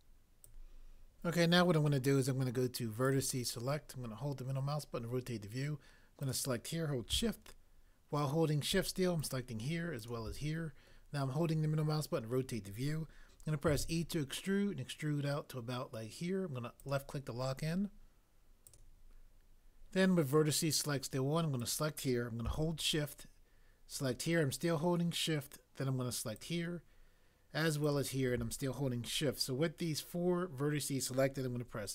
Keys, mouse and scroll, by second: 13.7 e.